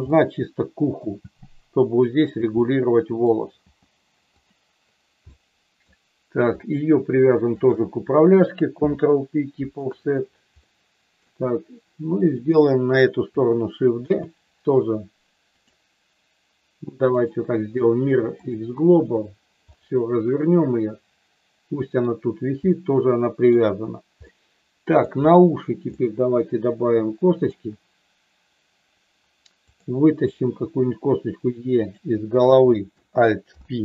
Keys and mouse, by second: 0.1 middle click, 1.2 g, 2.3 click, 2.6 middle click, 5.2 middle click, 6.6 click, 7.6 shift+click, 8.7 ctrl+p, 10.6 middle click, 12.3 click, 14.1 shift+d, 15.5 click, 17.2-18.4 right drag, 19.7-21.9 middle drag, 22.7 middle click, 24.2 middle click, 26.0-27.4 middle drag, 29.7 click, 30.6 e, 31.8 click, 32.3 click, 33.4 alt+p.